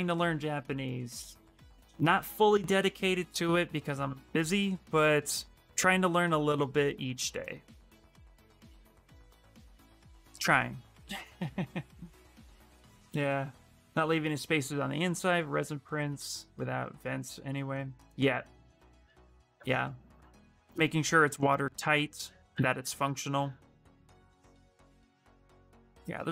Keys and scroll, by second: 23.1 s.